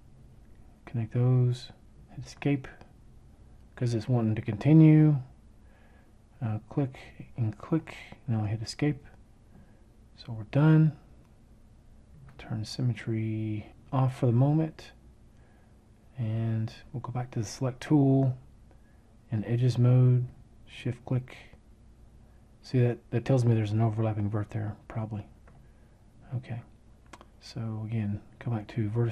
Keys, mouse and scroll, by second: 1.6 Escape, 7.7 Escape.